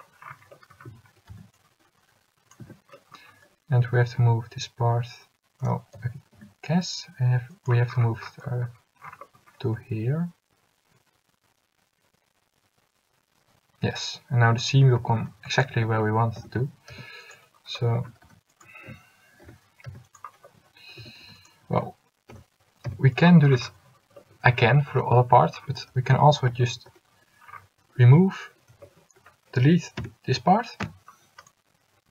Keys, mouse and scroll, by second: 1.0 a, 1.7 c, 4.0 g, 6.1 g, 9.8 g, 15.1 a, 15.6 c, 16.5 s, 18.1 a, 18.7 c, 19.6 s, 21.1 a, 21.5 c, 22.4 s, 28.1 a, 30.1 l, 30.9 x.